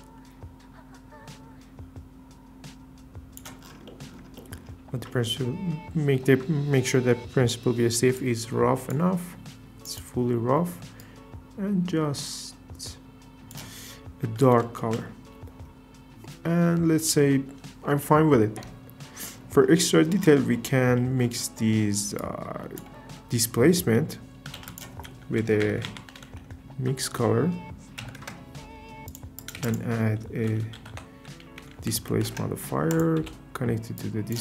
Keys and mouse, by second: 8.3 click, 9.8 click, 16.1 KP_0, 20.5 click, 22.2 click, 24.5 shift+a, 29.1-29.5 typing, 29.4 click, 33.0 typing, 34.0 click.